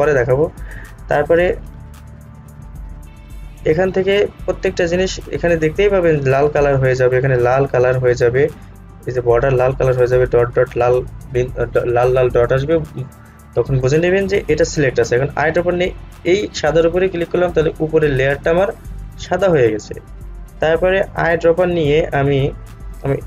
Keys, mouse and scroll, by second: 2.6-3.8 scroll up 1, 3.8 click, 16.3 click.